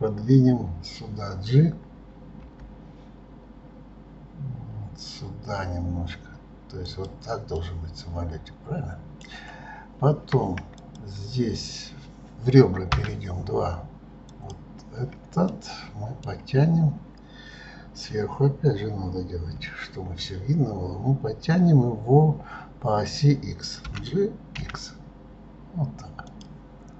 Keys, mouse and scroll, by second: 7.6-10.6 middle drag, 10.8 click, 12.9 2, 14.3 click, 15.5-18.5 middle drag, 19.6 KP_7.